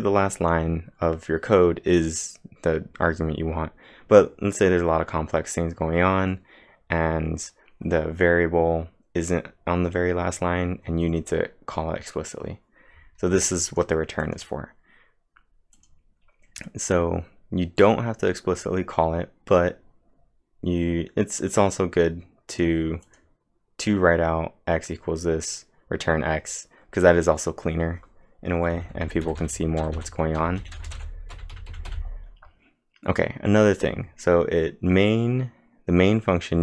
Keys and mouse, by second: 13.7 click, 14.2 click, 15.8 click, 21.1-21.9 typing, 21.4 click, 22.5 click, 23.1 click, 28.5-31.1 typing, 28.7 click.